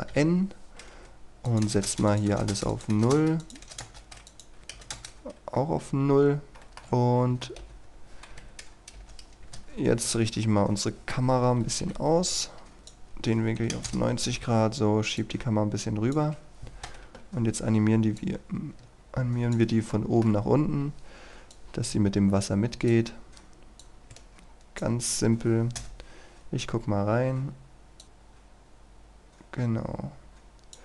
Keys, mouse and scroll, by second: 0.2 n, 1.5 click, 1.7 KP_0, 1.9 Return, 2.2 click, 2.4 KP_0, 2.6 Return, 2.8 click, 3.0 KP_0, 3.2 Return, 3.4 click, 3.7 KP_0, 3.8 Return, 4.3 click, 4.8 KP_0, 5.0 Return, 5.9-6.5 scroll up 1, 6.6 shift+middle click, 6.9 scroll up 1, 7.5 shift+middle click, 7.6 x, 8.4 KP_9, 10.5-11.8 scroll down 1, 11.8 KP_7, 12.7 scroll up 1, 12.8 click, 13.6 KP_9, 14.6-15.2 scroll down 1, 15.2 click, 17.0 KP_1, 18.2 click, 20.0 shift+middle click, 20.5-21.2 scroll up 1, 21.6-24.8 drag, 25.8 KP_0, 28.0-30.8 drag.